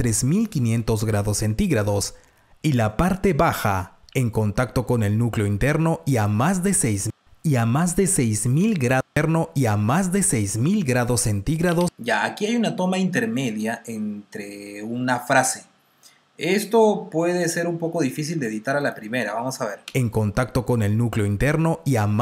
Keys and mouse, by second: 4.0 r, 6.3 click, 11.9-12.7 typing, 18.7 click, 19.9 space.